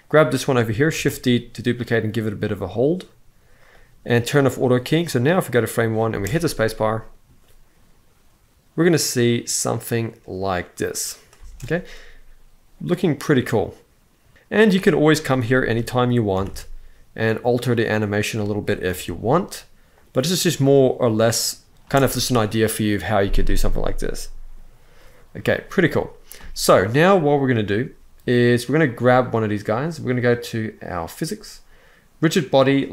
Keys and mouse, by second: 0.7 shift+d, 3.3-3.7 drag, 4.2 click, 4.8-5.5 drag, 5.9 space, 11.1 space, 12.8-13.9 drag, 14.4-15.5 drag, 15.5 r, 16.1 z, 16.2 z, 18.1-18.5 drag, 18.7 shift+d, 21.0 click, 21.6 space, 26.1 space, 30.8 click, 31.5 click, 32.5-32.9 drag.